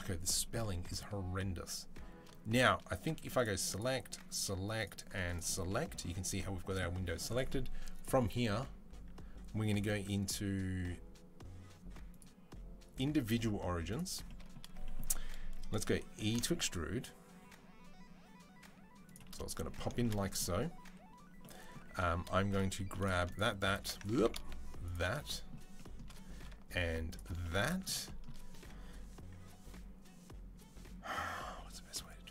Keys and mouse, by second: 3.6 middle click, 4.1 click, 4.6 middle click, 5.1-18.9 drag, 16.0 e, 18.9-22.8 middle drag, 21.7 3, 22.8 alt+shift+click, 23.4 shift+middle click, 23.9 ctrl+z, 24.1 alt+shift+click, 24.8-26.3 shift+middle drag, 26.3 alt+shift+click, 27.1 middle click, 27.7 shift+click, 28.0-32.3 middle drag.